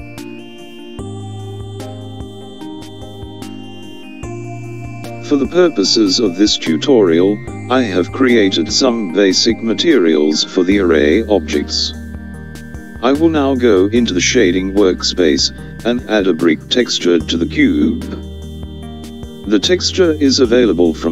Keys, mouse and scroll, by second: 3.4-11.9 drag.